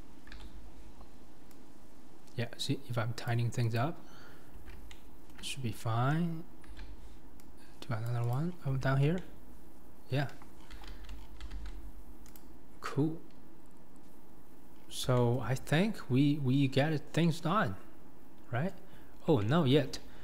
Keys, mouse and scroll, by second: 0.3 ctrl+r, 4.9-6.7 shift+middle drag, 8.5-8.8 scroll, 8.8 Tab, 9.2-10.3 middle drag, 10.3 KP_1, 10.6-11.5 scroll down 11, 10.9 alt+z, 11.5 alt+z, 11.9-12.4 scroll up 2, 12.4 click, 14.7-15.1 scroll down 5, 15.2-15.5 shift+middle drag, 15.5-16.2 scroll up 4, 16.2-16.8 scroll down 2, 16.8-17.2 scroll up 3, 17.2-18.9 middle drag, 18.9 scroll up 4, 19.1 scroll down 1, 19.4-19.9 shift+middle drag, 19.9 scroll up 2, 19.9-20.2 middle drag.